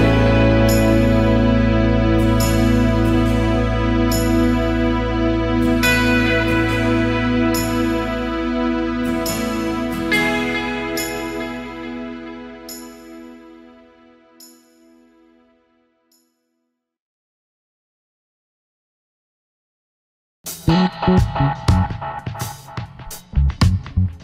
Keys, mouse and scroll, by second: 3.3 alt+scroll down 1, 3.6 space, 4.5 alt+scroll up 1, 4.7 space, 8.1 alt+scroll up 1, 8.2 space, 10.8 alt+scroll down 1, 11.0 space, 13.7 space, 21.2 shift+click, 22.7 space.